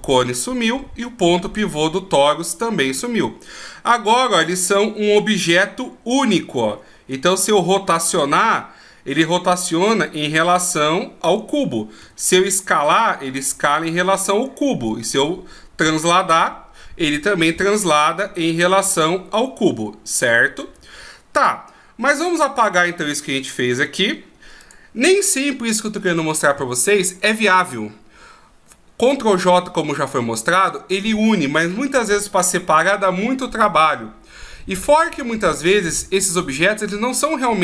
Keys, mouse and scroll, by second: 4.1 g, 7.2 r, 12.0 s, 15.1 g, 23.7 x.